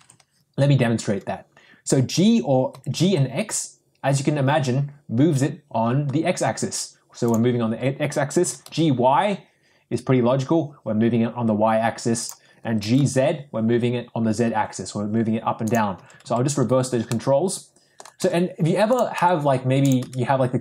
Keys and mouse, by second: 2.7 g, 8.4 g, 12.9 g, 15.9 ctrl+z, 16.3 ctrl+z, 17.3 middle click, 18.1 g, 19.1 r, 19.9 s.